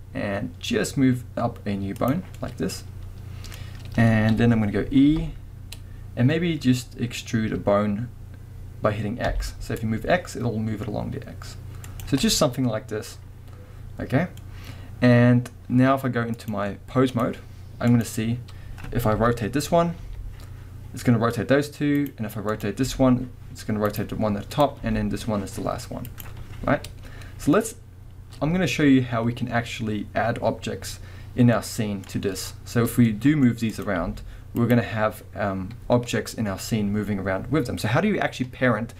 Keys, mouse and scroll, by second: 2.1 click, 2.3 scroll down 1, 2.4 middle click, 3.5 middle click, 4.3 KP_1, 5.1 e, 12.0 click, 12.3 middle click, 13.9-16.4 middle drag, 16.4-18.0 drag, 19.1 KP_1, 20.1 r, 22.1 right click, 22.5 click, 22.8 r, 24.0 right click, 24.6 drag, 24.8 r, 26.2 right click, 31.5-33.7 middle drag, 33.7 click, 34.0 r, 34.7 right click.